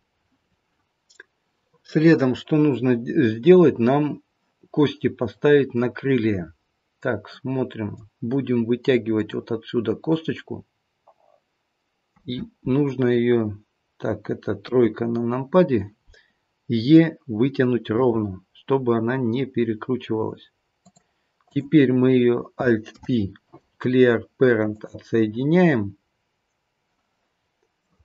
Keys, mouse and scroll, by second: 1.2 middle click, 1.2-2.2 scroll up 2, 5.7 middle click, 9.1 click, 10.2 middle click, 14.6 KP_3, 18.0 e, 21.4 click, 22.9 alt+p, 27.8 middle click.